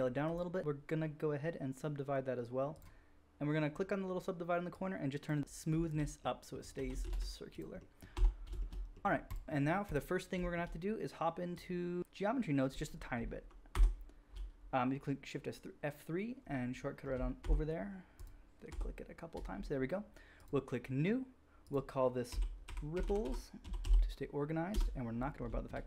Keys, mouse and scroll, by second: 3.5 click, 3.5 middle click, 3.5 right click, 5.9-7.5 shift+middle drag, 6.7 g, 6.9 g, 7.3 click, 7.3 right click, 7.5 drag, 8.0-8.5 drag, 8.2 Tab, 9.3-9.9 middle drag, 10.5-13.5 shift+drag, 11.5-13.5 middle drag, 11.5-13.5 right drag, 13.7 shift+F3, 13.8-14.7 shift+drag, 13.8-14.7 shift+middle drag, 13.8-14.7 shift+right drag, 18.1 shift+F3, 18.6 shift+F3, 19.3-20.4 drag, 23.0 p.